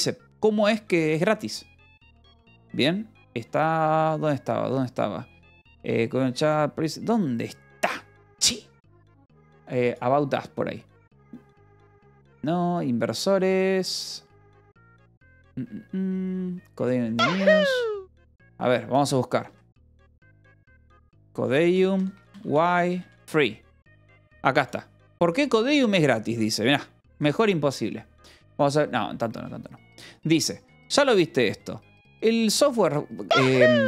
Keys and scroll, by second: 19.6-23.2 typing, 27.6 ctrl+=, 29.5 =, 31.0 j.